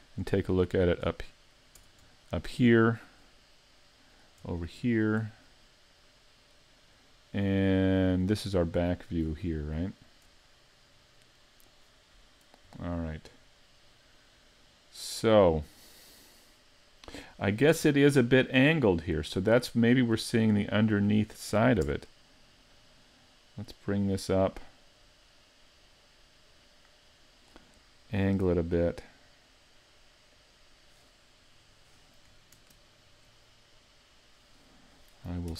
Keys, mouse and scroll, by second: 0.0 ctrl+alt+q, 0.4-0.7 scroll up 3, 4.7-5.5 scroll up 4, 8.3-8.9 scroll up 1, 8.9-9.6 scroll down 1, 9.6-11.4 scroll down 2, 22.8 Tab, 22.8 click, 30.5 click, 30.5 r, 32.7 alt+space.